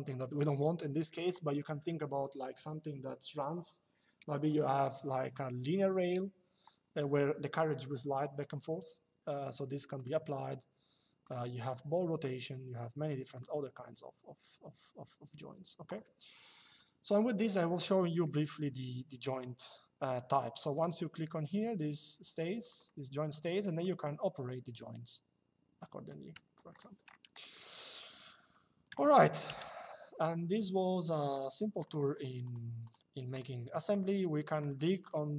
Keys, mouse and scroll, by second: 9.7 click, 10.9 click, 13.1 click, 17.8 click, 20.5 click, 22.3 click, 23.5 click, 26.0 Escape, 27.1 middle click, 29.2 Delete, 31.0 click.